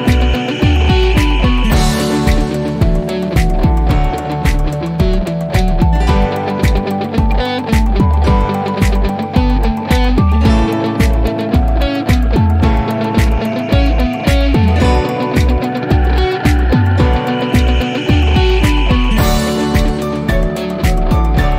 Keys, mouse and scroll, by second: 6.5-6.9 drag, 7.7-8.1 typing, 9.2-9.6 typing, 12.2 click, 14.0 click, 16.5 click, 18.6-19.1 click, 19.8 typing, 20.9 Return.